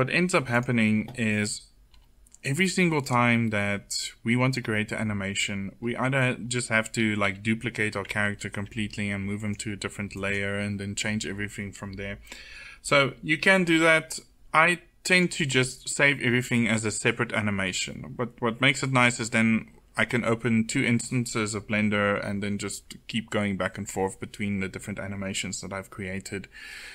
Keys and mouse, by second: 1.2 middle click, 1.5 click, 6.3 a, 6.6 a, 15.8 click, 16.4-18.6 middle drag.